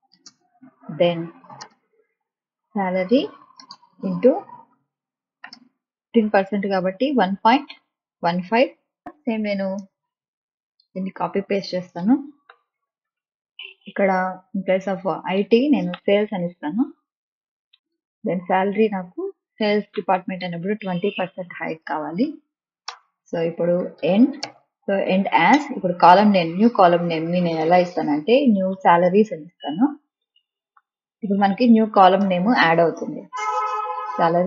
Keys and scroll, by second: 0.0-5.3 typing, 5.8 ctrl+v, 7.7 ., 9.0 Return, 11.4 ctrl+c, 12.4 Return, 12.9 ctrl+v, 15.9 BackSpace, 16.5 ctrl+s, 16.8 a, 17.7 BackSpace, 18.4 s, 19.9 BackSpace, 20.8 2, 21.1 0, 22.8 Return, 23.5-25.7 typing, 27.3-32.2 typing, 34.1 Left.